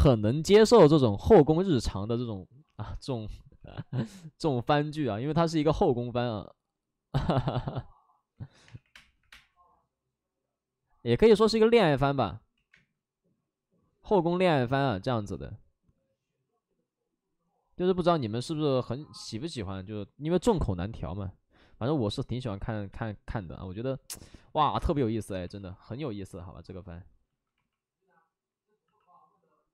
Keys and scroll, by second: 2.8 alt+s, 3.5 w, 8.6-9.2 typing, 12.5 ctrl+z, 12.6 space, 14.6 space, 15.1 w, 18.5 2, 19.6-20.8 typing, 24.2 ctrl+z, 24.2 space, 25.2 alt+s, 28.6 alt+s, 28.8 c.